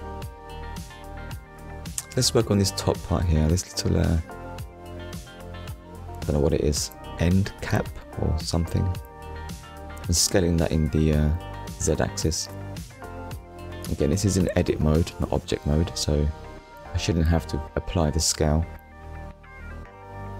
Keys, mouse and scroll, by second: 0.4 scroll up 1, 1.3 scroll down 1, 3.4 scroll down 1, 4.4 Tab, 13.3 click, 18.7 right click.